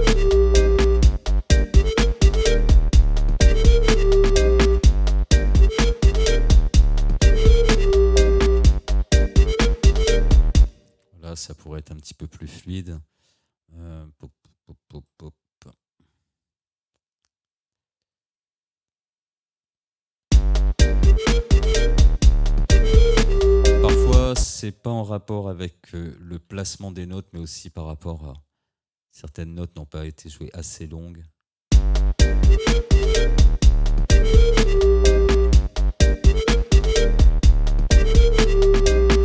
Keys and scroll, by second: 10.6 space, 20.3 space, 24.4 space, 25.9 ctrl+z, 31.7 space.